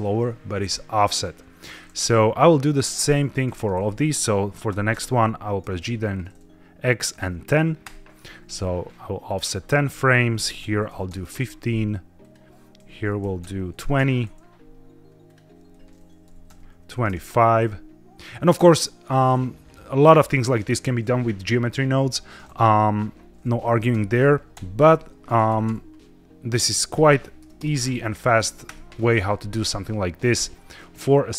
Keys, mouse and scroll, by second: 0.1-1.8 middle drag, 2.8 click, 3.3 a, 4.6 g, 4.8 x, 7.0 KP_1, 7.1 KP_0, 7.7 KP_Enter, 9.1 click, 9.8-10.8 typing, 11.0 KP_Enter, 12.1 click, 12.7-13.7 typing, 13.8 KP_Enter, 15.1 click, 15.6-16.8 typing, 17.0 KP_Enter, 22.3 click, 23.8-25.5 typing, 27.3 BackSpace, 27.5 BackSpace, 27.6 KP_3, 27.7 KP_0, 28.6 KP_Enter, 29.7-30.2 middle drag, 30.3-30.8 scroll down 3, 30.4 middle click, 31.2-31.3 middle drag.